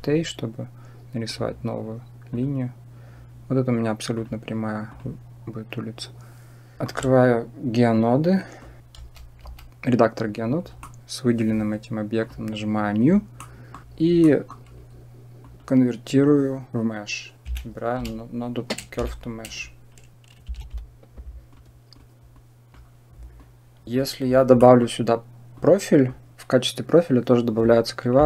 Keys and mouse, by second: 1.1 click, 2.2 click, 4.1 click, 8.1 click, 8.9 shift+F3, 9.3 shift+F3, 10.7 shift+middle drag, 12.1 click, 13.2 middle click, 14.1 middle click, 15.3-21.9 drag, 22.3 click, 23.2 click, 24.4 middle click, 25.4-28.2 drag.